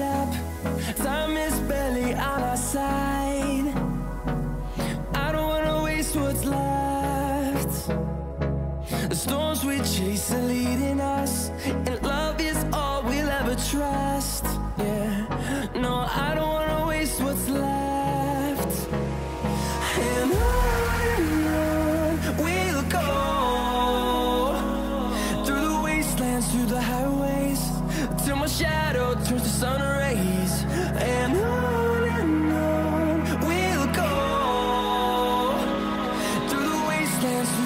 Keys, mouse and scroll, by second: 2.9 click, 8.5 Up, 10.6-11.2 scroll down 1, 12.4 scroll up 1, 14.7-17.0 drag, 26.4 scroll up 1, 27.6 right click, 27.7 right click, 28.2 click, 29.0 scroll up 1, 30.2-37.6 drag.